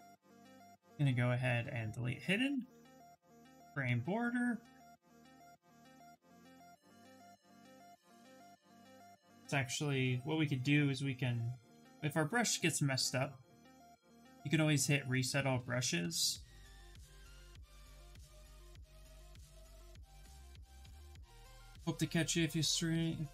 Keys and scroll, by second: 0.3 2, 6.3 s, 18.9 Return.